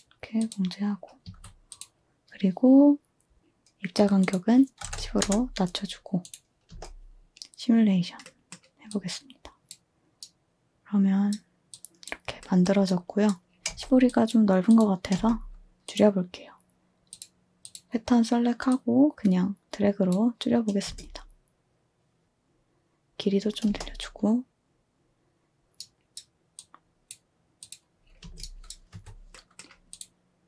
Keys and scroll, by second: 1.2 a, 4.5-5.4 typing, 6.4-7.2 typing, 8.5 typing, 13.6 space, 13.7 space, 15.1 space, 20.8 space, 22.2 space, 28.2 space, 28.9 space.